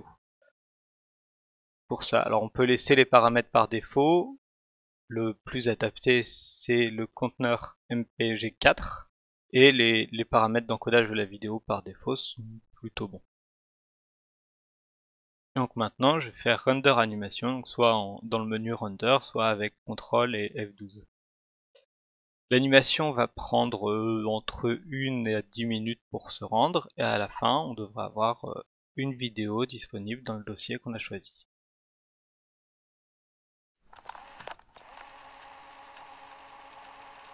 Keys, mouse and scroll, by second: 3.1 click, 6.1-6.8 drag, 14.3 click, 31.9 click.